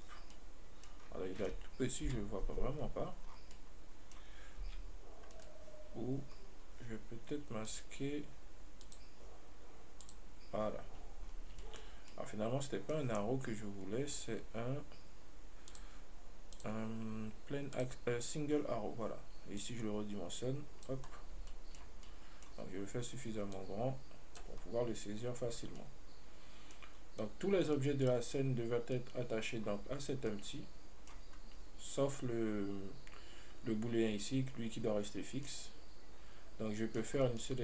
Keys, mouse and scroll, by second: 0.0 click, 0.4 scroll down 1, 0.6-1.3 middle drag, 1.3-2.3 scroll up 2, 2.3 KP_Decimal, 3.1 scroll down 3, 3.8-4.9 middle drag, 4.9 g, 5.7 right click, 6.6 scroll up 1, 7.9 click, 9.1-11.0 drag, 11.0 scroll up 1, 11.8-15.4 shift+middle drag, 16.0 click, 16.8-19.0 drag, 19.0-19.9 scroll down 1, 19.9-21.4 drag, 21.4-21.8 scroll down 2, 21.8-22.3 shift+middle drag, 22.3 scroll down 1, 22.3-23.8 middle drag, 23.8-25.1 drag, 25.1-26.0 scroll up 1, 26.0-27.2 middle drag, 27.2-28.0 scroll up 1, 28.0-30.4 middle drag, 30.4 scroll down 1, 30.6-35.4 middle drag, 35.4-35.7 scroll up 1, 35.7-37.5 middle drag, 37.5 scroll down 2.